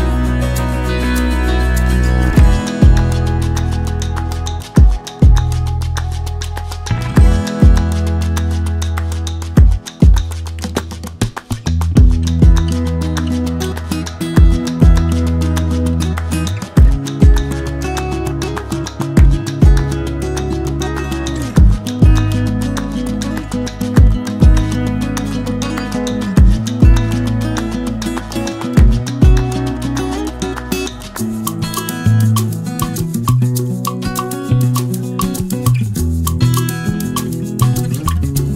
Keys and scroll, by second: 10.2-10.7 shift+Down, 35.0 ctrl+alt+z.